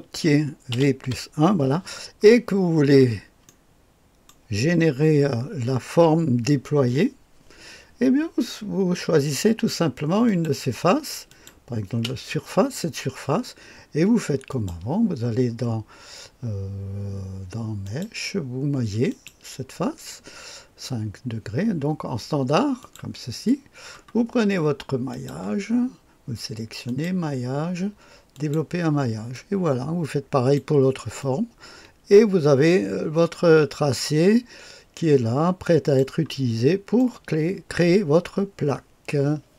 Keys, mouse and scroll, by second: 0.7 v, 1.0 KP_1, 3.5-4.7 drag, 10.3 click, 11.3 click, 12.0 space, 14.5 click, 17.9 click, 19.1 click, 22.8 click, 25.1 click, 26.9 click, 28.3 click, 29.4-30.6 drag, 31.2-36.0 drag, 36.3-37.4 drag.